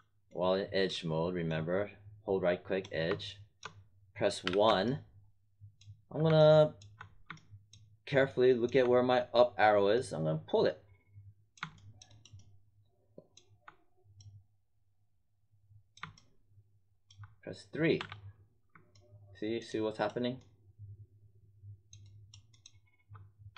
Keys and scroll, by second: 4.4 w, 17.9 3.